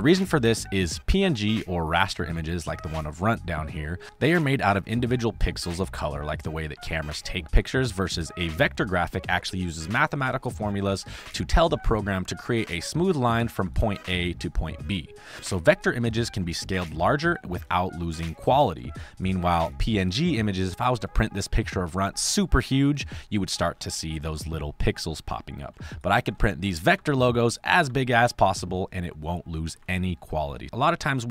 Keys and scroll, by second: 2.1 space, 9.3 space, 11.2 space, 13.5 space, 16.3 space, 18.7 space, 25.7 space, 26.9 space, 27.7 space, 28.4 space.